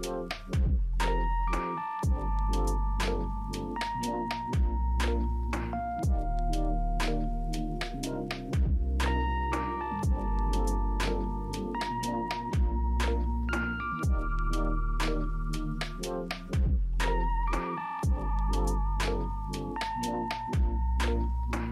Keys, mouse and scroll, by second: 1.8 double click.